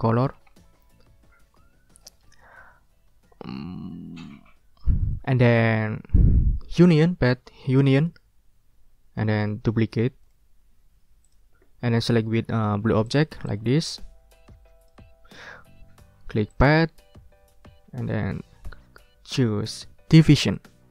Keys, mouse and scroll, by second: 0.1 ctrl+click, 0.5 ctrl+scroll down 2, 7.9 click, 10.2 right click, 11.2 click, 13.1 shift+click, 13.4-15.1 shift+drag, 15.1 ctrl+z, 16.5 click, 20.4 click.